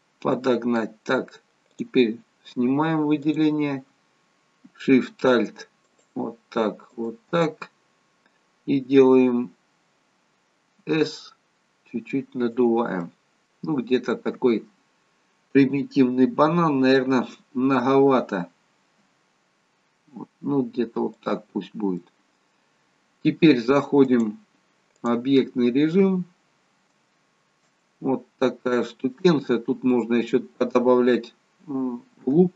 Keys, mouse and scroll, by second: 1.8 click, 5.9 click, 10.9 s, 13.1 middle click, 13.8-16.2 scroll down 2, 14.2 middle click, 19.1 s, 22.0 middle click, 24.2 click, 25.7-26.5 scroll up 1, 26.5-27.0 scroll up 1, 27.2 shift+middle click, 27.9 middle click.